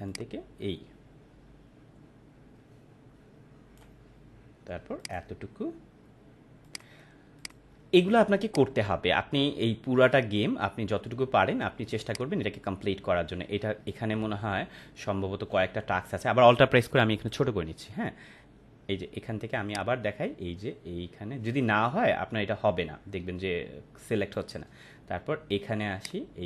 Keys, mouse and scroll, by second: 0.0-3.8 click, 5.0 click, 12.0-17.4 drag, 19.6-24.4 drag, 26.0-26.4 drag.